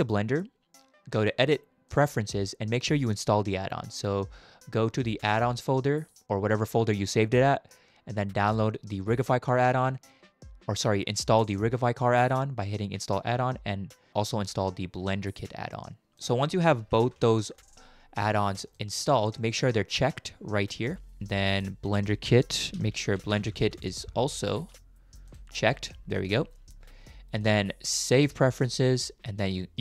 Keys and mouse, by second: 1.3 click.